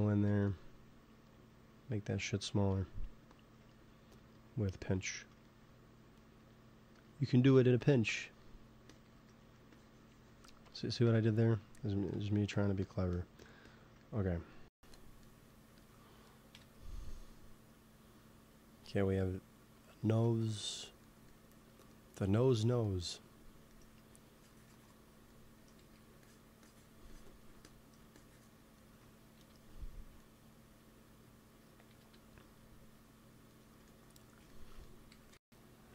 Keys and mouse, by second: 2.6-4.4 drag, 4.1 f, 4.8 f, 6.7 f, 7.2-15.5 drag, 15.6 ctrl+s, 16.6 KP_1, 24.2-30.1 drag, 25.7 f, 29.3 KP_1, 31.9 KP_3, 35.0 g, 35.2 f, 35.8 f.